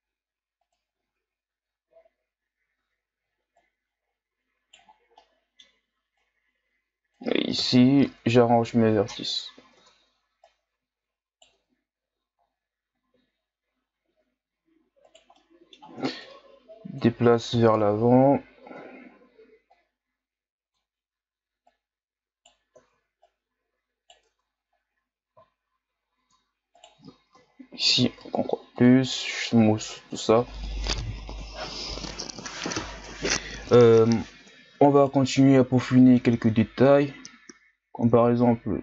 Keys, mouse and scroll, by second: 1.1 Tab, 1.8-2.4 scroll down 4, 2.4-2.8 scroll up 2, 2.8 Tab, 3.6 right click, 4.9 scroll down 2, 5.2-6.2 middle drag, 6.2-7.6 drag, 7.6 KP_1, 8.0 Tab, 8.8 scroll down 2, 9.3-9.7 scroll up 5, 9.7 Tab, 10.4 right click, 11.5 Tab, 12.4-13.4 scroll down 2, 13.4-14.1 shift+scroll up 5, 14.1 Tab, 15.0 right click, 15.3 middle click, 16.2-17.5 drag, 17.5 KP_1, 17.8 Tab, 18.6 Tab, 19.7-21.7 drag, 21.7 right click, 22.8 ctrl+z, 23.2 right click, 24.3 Tab, 24.8-25.5 scroll down 1, 25.5-26.2 shift+scroll up 3, 26.2 Tab, 26.8 right click, 27.3 ctrl+KP_Add, 28.2 w, 29.5 Tab, 30.5 scroll down 1, 34.1 Tab, 35.0 right click, 35.8 middle click, 36.3-37.0 scroll up 1, 37.0-38.8 drag.